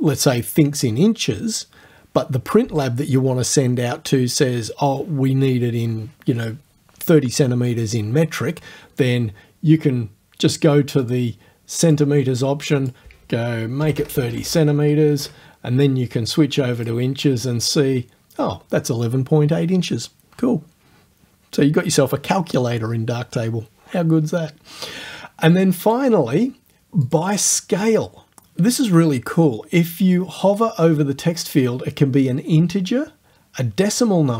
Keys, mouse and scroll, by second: 11.1 click, 11.9 click, 12.7 click, 13.8 BackSpace, 15.1 KP_3, 15.2 KP_0, 16.8 click, 17.7 click, 25.9 click, 27.1 click.